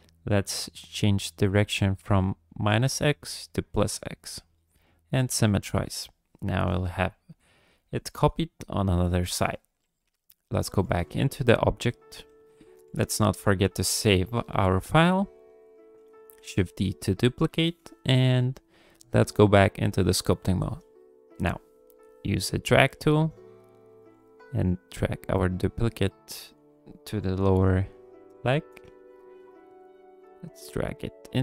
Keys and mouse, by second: 6.9 ctrl+click, 10.0 click, 12.9 ctrl+s, 15.2 click, 16.4 shift+d, 18.5-19.9 drag, 21.4 click, 21.5 middle click, 21.6 click, 21.8 shift+click, 22.9 v, 24.1-26.6 drag, 27.5 KP_3, 28.5 shift+middle click, 29.0 ctrl+click, 29.9-31.4 drag.